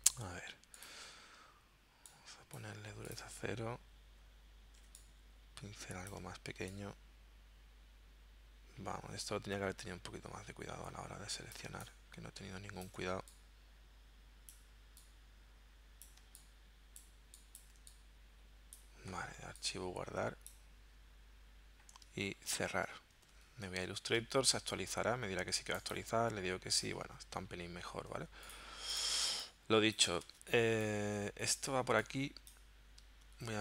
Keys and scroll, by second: 11.7 space, 16.3 space, 22.3 super+w, 23.3 super+Tab, 28.2 z, 29.2 space, 30.3 v, 33.2 super+Tab.